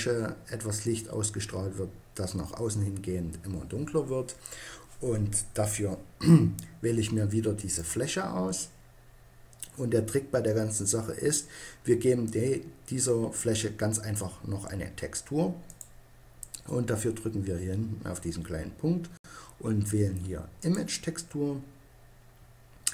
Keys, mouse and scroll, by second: 7.5-9.3 drag, 11.5-15.6 middle drag, 15.6-17.4 drag, 22.8 click.